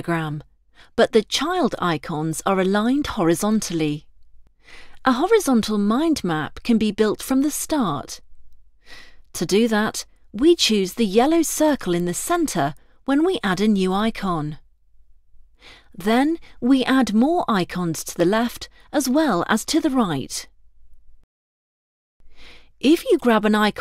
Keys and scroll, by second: 13.4 ctrl+Return, 15.7 ctrl+Return, 18.2 ctrl+Return.